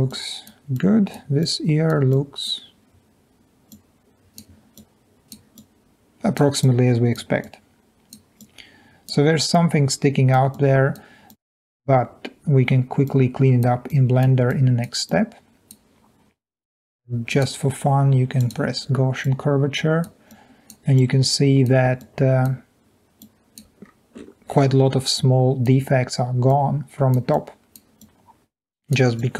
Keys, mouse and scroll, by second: 0.1 click, 4.7 click, 5.6 click, 6.7 click, 7.4-8.1 drag, 8.4-9.1 drag, 9.5 click, 10.5 click, 11.3-11.7 drag, 13.2-13.7 drag, 14.0 click, 14.6 drag, 15.0 click, 19.2 click, 20.5 click, 21.1-21.6 drag, 22.0-22.4 drag, 23.2-23.6 drag, 23.9 scroll up 2, 24.2-25.7 scroll down 2, 25.0 middle click, 25.1-25.7 drag, 26.5-27.1 drag, 28.5 click, 28.7 click, 29.1-29.3 drag.